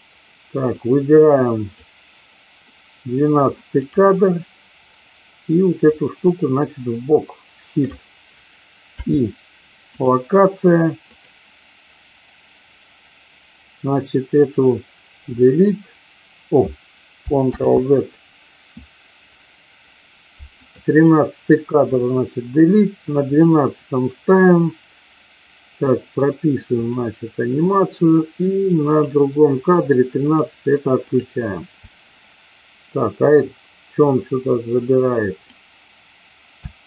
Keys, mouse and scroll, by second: 0.8-1.9 drag, 3.6 click, 5.8-8.0 drag, 8.9 i, 11.1 click, 15.3 Delete, 19.1 ctrl+z, 20.5 click, 21.9 Delete, 23.4 click, 26.7 click, 28.9 click, 30.3 click, 31.1 click, 33.9-35.6 drag, 36.6 space.